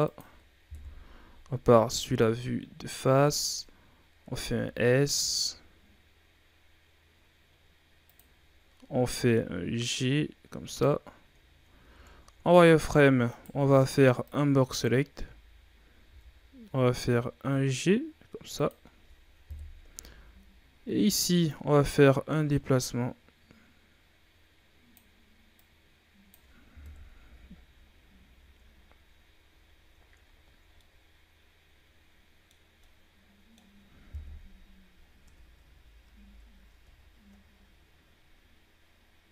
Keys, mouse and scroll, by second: 0.6 KP_1, 2.1-4.2 drag, 4.2 s, 8.8 scroll down 2, 9.1-9.7 scroll up 1, 9.7-11.3 drag, 11.3-11.6 shift+scroll down 2, 11.6 z, 12.0-12.4 ctrl+scroll up 2, 12.4-12.7 shift+scroll down 2, 13.2 right click, 13.5 b, 15.0 z, 16.0 g, 18.8 scroll down 1, 19.4 KP_3, 19.9 z, 20.6-21.1 scroll up 2, 21.4-24.5 drag, 25.5-26.8 drag, 26.8 KP_1, 27.2 z, 27.8-28.8 scroll down 5, 28.8-29.6 scroll up 5, 29.7-30.3 shift+scroll up 2, 30.3-30.7 ctrl+scroll down 4, 30.7-34.1 middle drag, 34.1 KP_1, 34.9 scroll down 5, 35.1 Tab, 35.6 a, 36.0 a, 36.1-36.6 scroll down 3, 37.0-38.8 shift+scroll up 12, 38.8-39.3 scroll down 5.